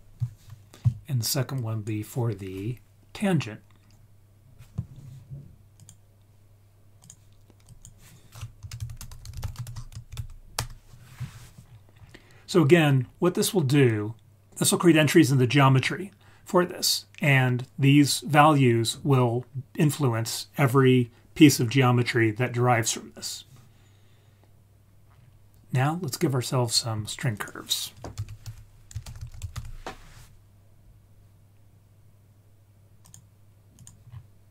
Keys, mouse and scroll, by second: 1.5-5.8 drag, 7.0 click, 7.6-10.5 drag, 9.1 t, 11.6-12.1 scroll down 4, 12.7-13.8 scroll up 3, 13.8 click, 13.8 scroll up 1, 16.6-17.8 scroll down 1, 25.0-26.7 scroll down 7, 26.6-27.2 scroll up 4, 27.3 click, 28.1 shift+a, 34.0-34.5 scroll down 2.